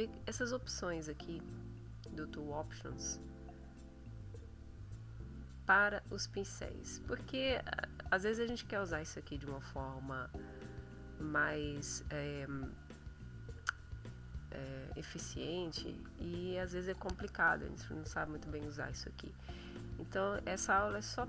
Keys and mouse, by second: 0.3-2.2 drag, 3.7-4.8 drag, 5.5-7.1 drag, 20.9 click.